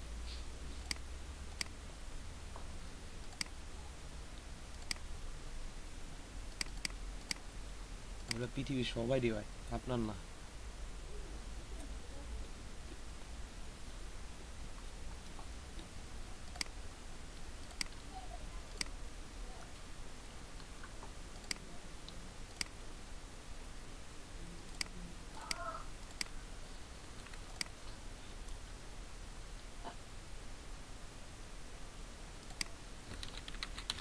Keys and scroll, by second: 33.4-34.0 typing.